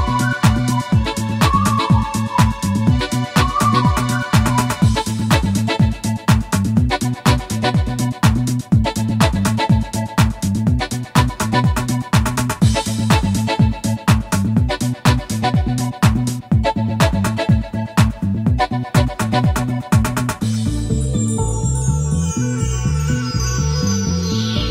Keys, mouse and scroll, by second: 1.9 F11, 3.7 shift+click, 6.1 click, 8.5 click, 9.4 click, 11.2-13.7 typing, 12.1 Tab, 13.9 Tab, 14.8-15.8 typing, 15.8 Return, 17.7 shift+click, 18.6 click, 19.1 click, 20.1 click, 21.0 click, 22.2 click.